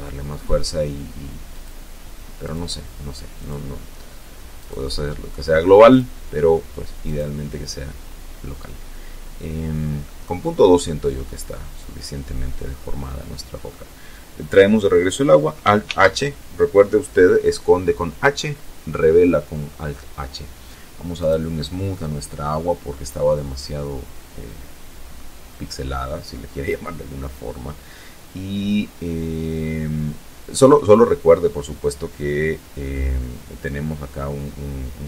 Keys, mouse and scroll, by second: 0.3 click, 1.2 click, 2.2 click, 3.4 click, 4.7 click, 5.9 click, 8.9 middle click, 9.9-12.7 middle drag, 14.7 alt+h, 20.0 click, 20.7-24.1 middle drag, 24.7 scroll down 1, 27.0-27.5 scroll down 1.